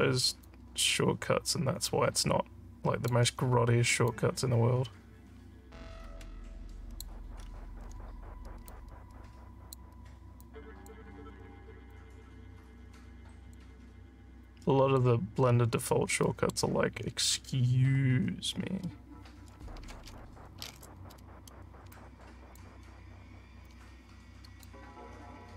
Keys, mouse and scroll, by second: 0.4-3.0 alt+drag, 4.0-7.0 alt+drag, 7.3 alt+scroll up 2, 8.6-9.7 drag, 10.4 click, 11.9-13.5 alt+drag, 13.8 scroll down 4, 14.4 alt+click, 15.4 alt+scroll down 4, 16.2 alt+middle click, 21.9 click, 23.7 click.